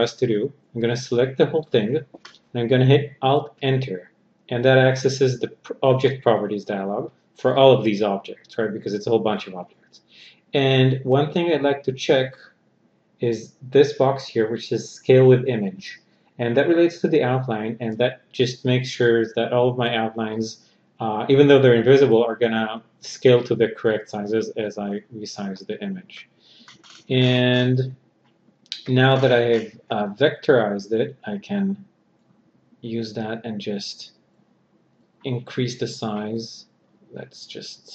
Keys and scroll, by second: 3.1 alt+Return.